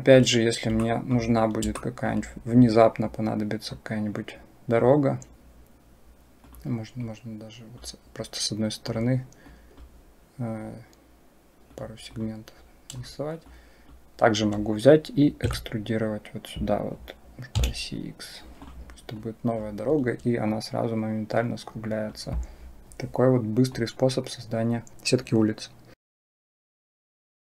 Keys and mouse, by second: 0.6 shift+click, 1.7 shift+click, 3.5-4.7 drag, 7.0 click, 8.7-9.7 drag, 11.5 click, 13.3 click, 15.3 e, 19.1 click, 20.4-22.0 drag, 23.7-24.9 drag.